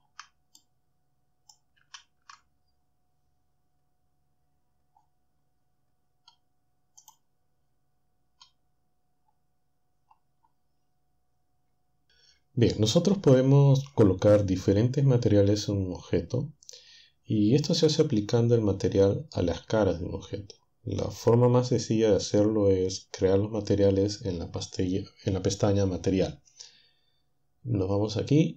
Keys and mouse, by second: 0.5-1.6 shift+drag, 1.9 ctrl+Down, 7.1 click.